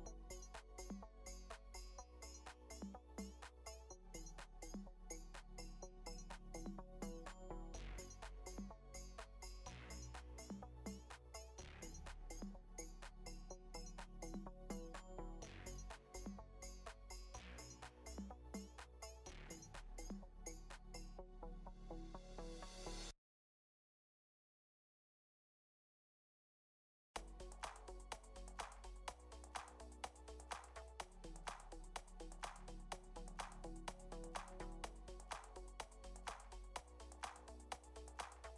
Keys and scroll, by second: 1.5 space, 3.1 space, 8.5 space, 9.4 space, 11.5 ctrl+-, 12.1 ctrl+z, 14.3 ctrl+z, 14.9 ctrl+space, 15.0 ctrl+space, 16.7 ctrl+z, 17.7 ctrl+0, 20.4 ctrl+space, 21.7 ctrl+z, 29.3 space, 32.9 space, 38.0 space.